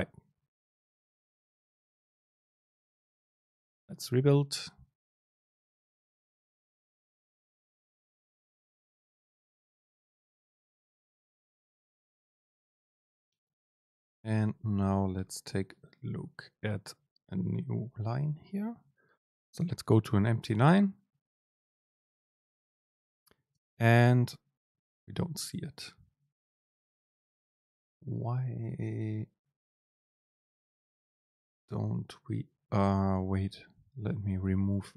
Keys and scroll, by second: 18.5 Return, 23.7 super+space, 31.0 super+space.